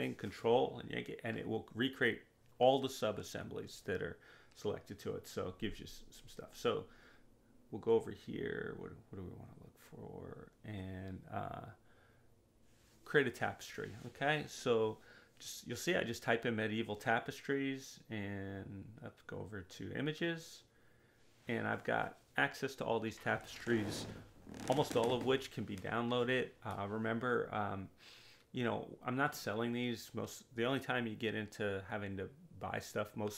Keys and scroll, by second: 8.8-13.9 typing, 14.2 Return.